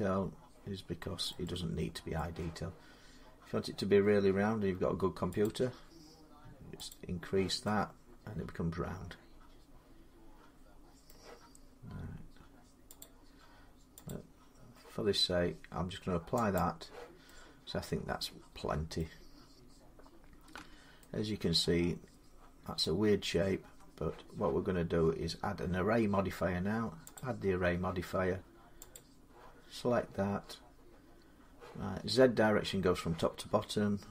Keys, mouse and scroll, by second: 1.1 scroll down 1, 1.9 scroll down 1, 5.2 click, 6.7 click, 10.8 middle click, 12.8 click, 13.9 click, 16.3 click, 18.7 middle click, 19.1-20.3 scroll down 5, 20.3 Tab, 22.6 middle click, 22.9 scroll up 8, 23.4 Tab, 27.0 click, 28.1 scroll, 28.7 click, 29.4-29.9 scroll down 4, 32.1 middle click.